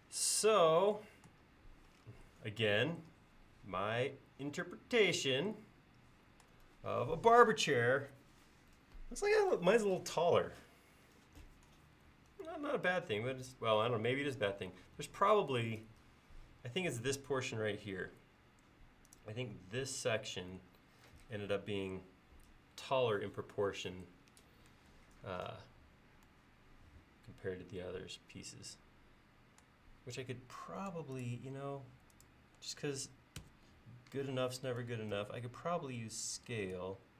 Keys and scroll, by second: 33.5 ctrl+s, 35.2 s.